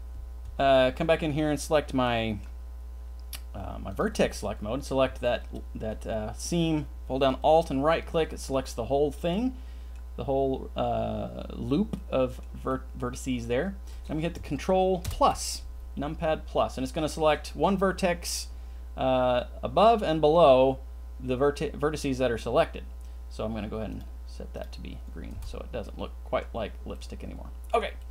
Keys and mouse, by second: 0.4 Tab, 2.1 click, 3.9 click, 5.4 alt+click, 9.3 middle click, 11.9 middle click, 12.7 middle click, 15.0 ctrl+KP_Add, 23.9 click, 25.4 Tab, 25.8-26.4 middle drag, 26.9 click, 27.0-27.7 middle drag, 27.9 middle drag.